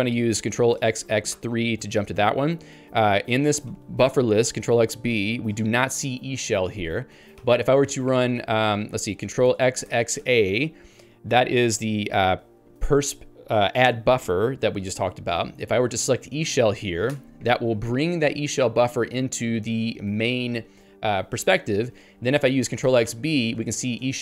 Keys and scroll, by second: 7.5 ctrl+g, 8.9 ctrl+g, 17.1 Return, 23.8 ctrl+j.